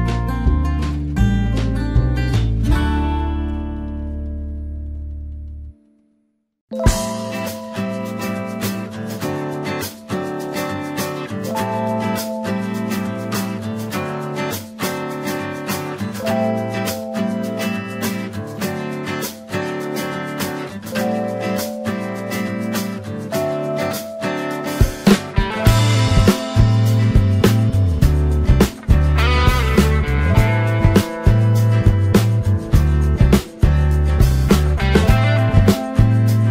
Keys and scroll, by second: 3.3 ctrl+t, 7.6 ctrl+b, 28.5 ctrl+l.